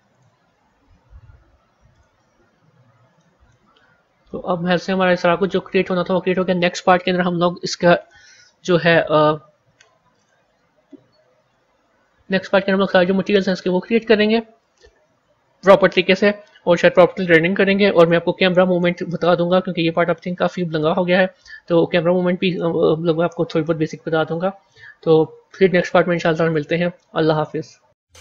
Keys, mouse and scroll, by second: 0.0 click, 0.4 scroll up 3, 1.8 click, 2.2-2.8 scroll up 5, 3.1 middle click, 3.6 scroll down 1, 4.2-5.8 middle drag, 5.8 a, 10.0-13.2 drag, 13.5-17.7 drag, 27.8 ctrl+End.